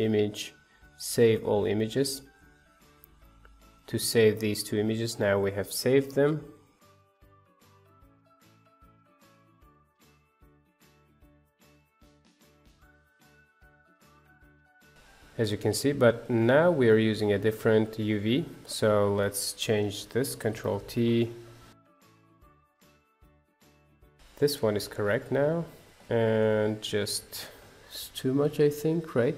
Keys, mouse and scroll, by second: 3.7 click, 6.9 click, 7.3 shift+d, 8.3 shift+a, 8.5 click, 8.8-9.1 scroll up 2, 9.9-11.5 drag, 11.5 shift+a, 11.7 scroll up 4, 12.2 click, 14.1 scroll up 1, 14.4 click, 14.8 click, 15.0-17.2 middle drag, 17.2-20.1 drag, 20.7 ctrl+t, 21.4 middle click, 22.2 click, 22.4 Delete, 24.0 click, 24.3 click, 24.7-27.9 middle drag, 27.9 scroll up 2, 28.5 scroll down 1.